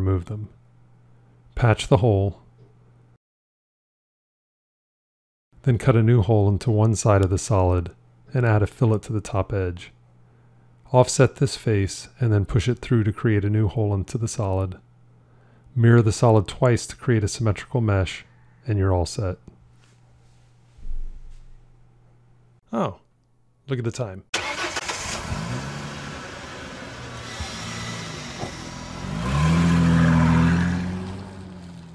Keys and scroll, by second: 8.8 q, 11.9 o, 16.1 alt+x, 18.2 alt+x.